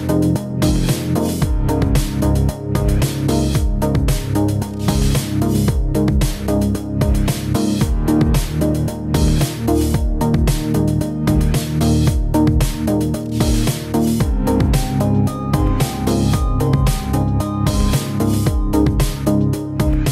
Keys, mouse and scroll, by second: 0.0 click, 0.2 click, 0.4 click, 0.4 middle click, 0.6 shift+middle click, 0.8 click, 0.8 scroll up 2, 1.1 click, 1.2 scroll down 3, 1.3 middle click, 1.6 click, 1.8 click, 2.2 click, 2.3 click, 2.6 click, 2.8 click, 3.1 shift+middle click, 3.3 middle click, 3.3 scroll up 4, 3.4 middle click, 3.8 click, 3.9 click, 4.2 middle click, 4.4 e, 4.9 click, 5.8 click, 5.9 click, 6.3 click, 6.6 e, 7.2 click, 7.4 click, 7.7 e, 8.1 click, 8.6 click, 9.3 click, 9.3 middle click, 9.7 click, 10.2 ctrl+z, 10.3 ctrl+c, 10.4 ctrl+v, 10.9 middle click, 11.0 click, 11.3 middle click, 11.4 KP_3, 11.6 shift+middle click, 11.8 g, 12.2-12.8 scroll up 7, 12.3 shift+middle click, 12.5 shift+middle click, 12.8 shift+middle click, 13.2 g, 14.4 middle click, 14.5-15.0 scroll down 4, 14.6 KP_1, 14.9 scroll up 3, 15.1 shift+middle click, 15.3 click, 15.4 shift+middle click, 15.5 g, 16.1 shift+middle click, 16.2 shift+middle click, 16.3-16.9 scroll up 3, 16.4 shift+middle click, 16.8 g, 17.1 scroll down 2, 17.2 shift+middle click, 17.5 click, 17.5 g, 17.8 scroll down 3, 17.9 shift+middle click, 18.2 middle click, 18.4 scroll down 2, 18.5 middle click, 18.9 click, 19.0 middle click, 19.2 middle click, 19.4 KP_Decimal, 19.5 scroll down 2, 19.6 middle click, 19.8 g, 20.0 middle click.